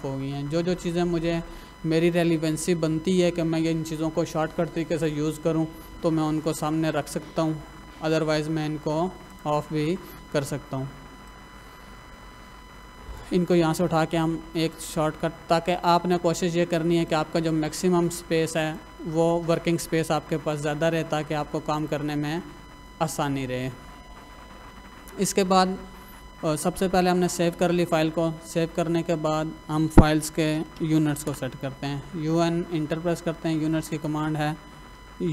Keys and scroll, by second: 27.5 Escape, 29.9 Escape, 30.3-31.2 typing, 35.0-35.3 typing.